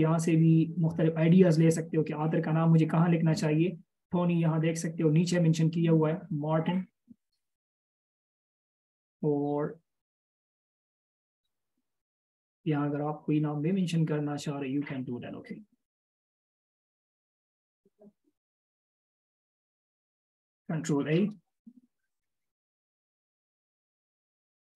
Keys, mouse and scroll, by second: 5.0 scroll down 1, 16.7-18.1 alt+shift+scroll up 1, 19.1 alt+shift+click, 21.4 ctrl+a, 22.4-23.9 typing.